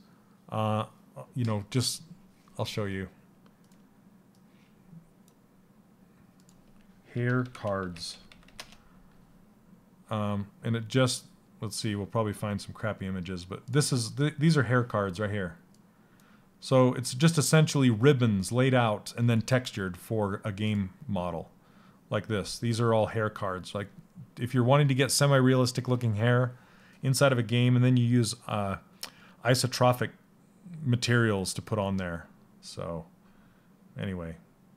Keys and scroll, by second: 6.4-8.3 typing.